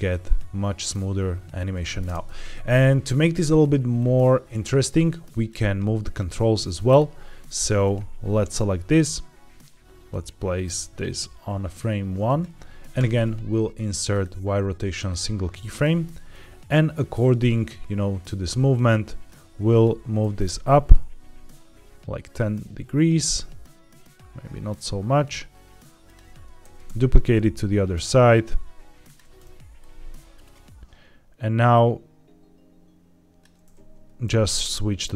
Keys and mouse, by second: 2.0 space, 3.9-5.4 drag, 8.4 click, 14.0 right click, 16.2-19.2 drag, 20.1 g, 20.3 y, 26.5 shift+d, 26.8 x, 29.7-33.3 drag, 34.1 shift+d.